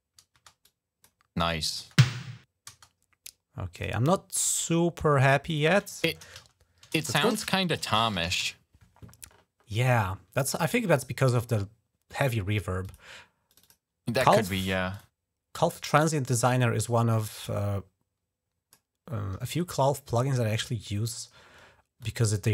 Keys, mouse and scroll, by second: 0.4 click, 1.3 click, 3.6 click, 4.4 right click, 4.9 typing, 5.3 click, 6.4-8.8 typing, 11.1 click, 12.6 click, 13.3 click, 13.4 click, 14.7 click, 16.9-18.5 drag, 18.8 click, 21.8 click.